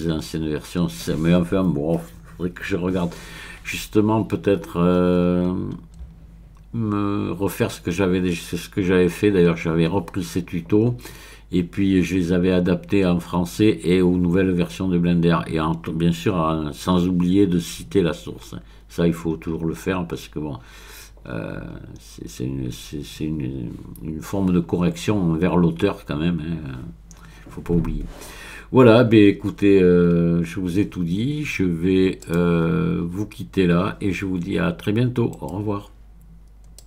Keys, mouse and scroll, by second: 0.6-2.3 scroll up 3, 2.9-3.9 scroll up 1, 4.4-6.8 scroll up 5, 7.5-8.3 scroll up 2, 9.3-10.1 scroll up 2, 10.7-11.6 scroll up 3, 12.1-12.9 scroll up 3, 13.7-15.9 scroll up 4, 16.3-17.2 scroll up 1, 18.3-21.0 scroll up 1, 21.2-22.8 scroll up 1, 24.4-27.0 scroll up 5, 32.2 click, 35.4-36.7 right drag, 36.7 click.